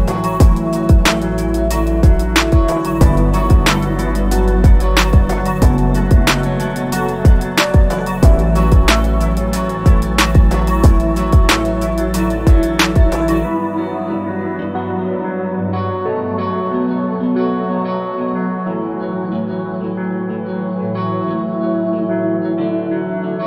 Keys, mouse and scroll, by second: 0.3 i, 1.2 e, 2.1 middle click, 2.9 scroll down 1, 3.1 middle click, 3.3 scroll up 1, 3.4 g, 4.7 click, 5.1 KP_1, 5.7 middle click, 6.0 scroll up 1, 6.5 click, 7.4 click, 7.6 middle click, 7.9 s, 9.2 scroll down 2, 9.5-10.0 scroll up 2, 10.0 click, 10.6 typing, 14.5 click, 14.9 scroll down 3, 15.0 middle click, 15.1 scroll up 1, 17.0 Tab, 17.5 click, 18.3 click, 19.0 click, 20.2 middle click, 20.5 Tab, 20.6 scroll up 1, 21.0 click, 21.5 middle click, 22.4 ctrl+r.